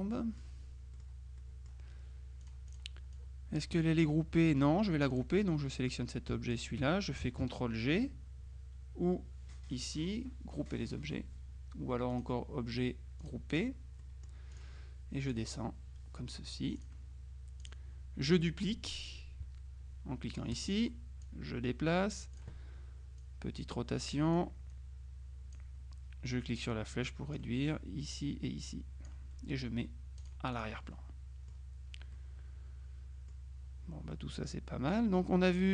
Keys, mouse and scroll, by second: 0.2 middle click, 0.7 scroll down 1, 0.9 scroll up 1, 1.0 middle click, 2.5-3.3 drag, 5.2-6.3 drag, 6.6 shift+click, 12.3 click, 13.3 click, 14.1 middle click, 14.6 click, 15.3 click, 16.9 click, 17.7 click, 20.6 click, 21.3-22.9 drag, 23.3 click, 26.7-27.9 drag, 28.1 click, 30.3-31.2 drag, 32.2-33.9 drag, 34.2 middle click, 34.9 click, 35.6 click.